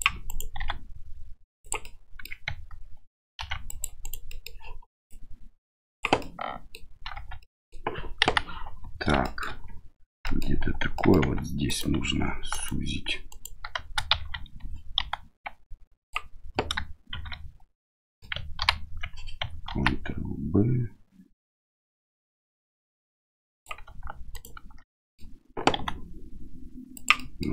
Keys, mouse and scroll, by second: 0.5 s, 1.9 middle click, 3.3 ctrl+r, 4.3 middle click, 5.0 click, 6.2 middle click, 7.1 Tab, 7.4 middle click, 8.2 KP_1, 9.2 shift+middle drag, 10.2 middle click, 10.9 middle click, 11.2 Tab, 11.6 right click, 12.5 alt+right click, 13.3 alt+right click, 14.1 shift+z, 15.0 s, 18.0 middle click, 18.6 ctrl+v, 19.7 ctrl+b, 24.3 alt+right click, 24.9 middle click, 25.7 s, 27.1 middle click.